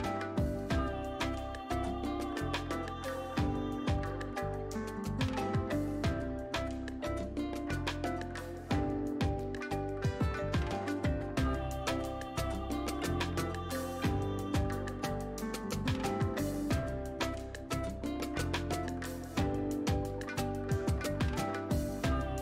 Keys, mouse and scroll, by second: 1.1-5.3 shift+drag, 5.3 Up, 7.0 click, 12.1 click, 16.9 right click, 18.0 click, 19.8 right click, 20.9 click.